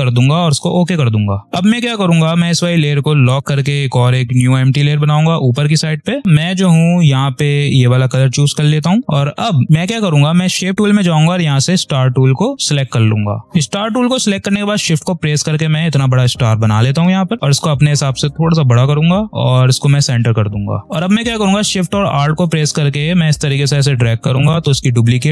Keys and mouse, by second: 6.2 i, 7.3 ctrl+click, 9.0 right click, 9.7 click, 10.7 space, 10.7 click, 11.2 space, 13.1-15.5 drag, 15.5 v, 16.0-18.2 drag, 21.2-25.3 drag.